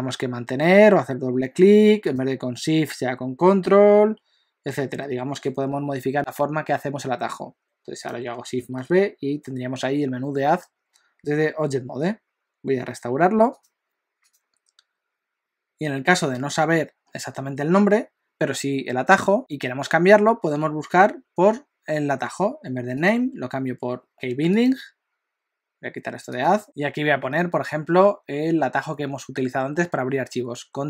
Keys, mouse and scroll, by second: 8.5 shift+b.